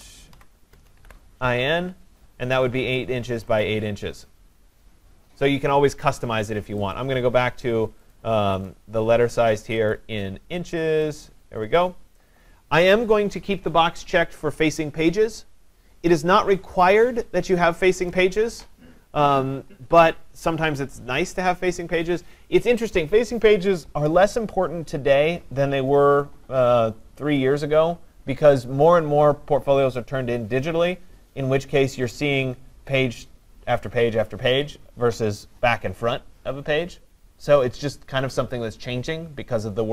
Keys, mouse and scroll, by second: 0.0-1.4 typing, 3.7 click, 6.0 typing, 8.2 click, 8.7 click, 9.9 click, 11.2 click.